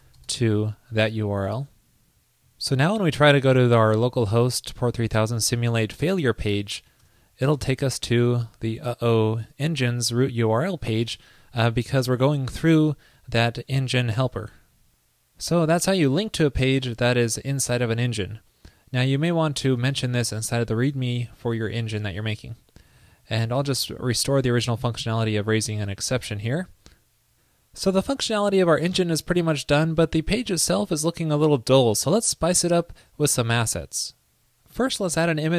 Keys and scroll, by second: 1.5 super+s, 23.1 super+/, 24.1 super+v, 26.7 super+s.